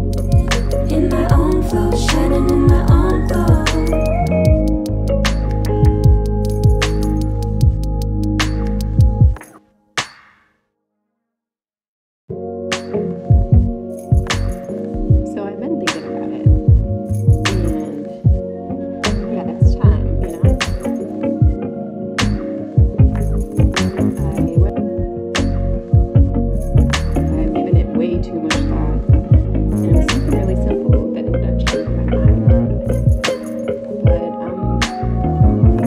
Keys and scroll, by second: 8.8 KP_1, 11.8 Up, 12.2 Up.